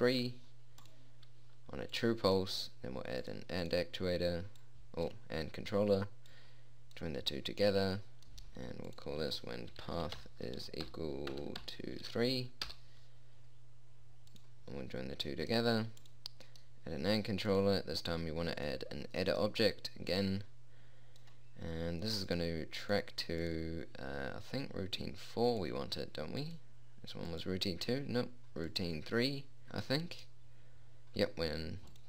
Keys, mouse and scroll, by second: 2.5-8.8 drag, 8.8 middle click, 9.4-14.3 drag, 14.8-19.7 drag, 20.0-29.7 drag.